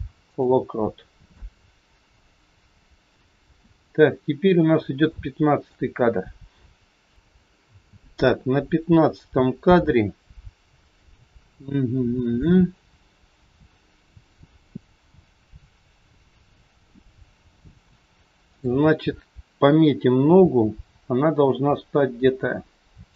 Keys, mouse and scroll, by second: 1.3 click, 5.1 shift+middle click, 14.8 scroll down 2, 18.5 click, 20.1 g.